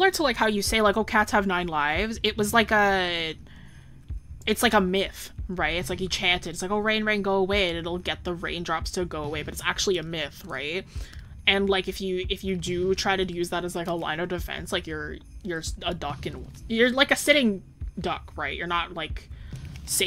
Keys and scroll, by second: 0.5 scroll up 1, 4.7 scroll down 1.